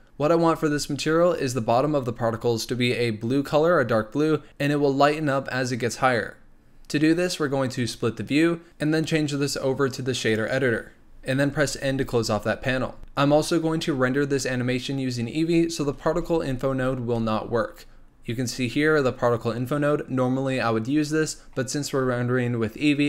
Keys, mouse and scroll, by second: 7.8-11.8 drag, 11.8 n, 12.6-13.0 scroll up 3, 15.9 shift+a.